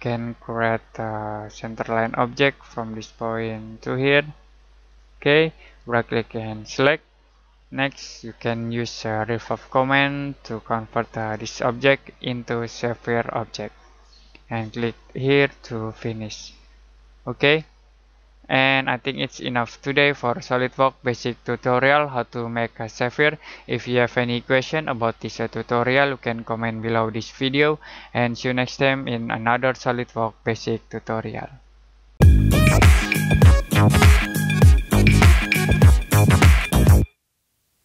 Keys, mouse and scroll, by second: 5.6 right click, 6.6 click, 12.9 middle click, 15.2 click, 17.0 middle click, 17.5 scroll down 1, 17.9-19.0 scroll up 1, 19.0 click.